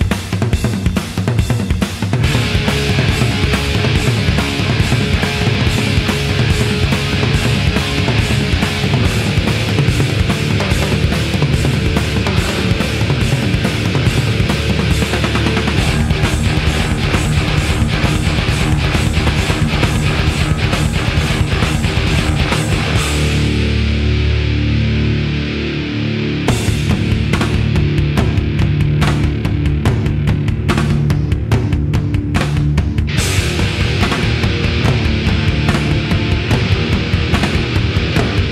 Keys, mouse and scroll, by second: 0.8 Tab, 2.0 w, 4.5-6.2 drag, 6.5-10.4 drag, 12.7-14.4 drag, 14.8-16.4 drag, 16.0 s, 18.1 middle click, 18.1 s, 18.2 e, 20.0 Delete, 21.1 Tab, 22.4-25.0 drag, 26.1-29.3 drag, 29.1-32.9 middle drag, 34.7 KP_7.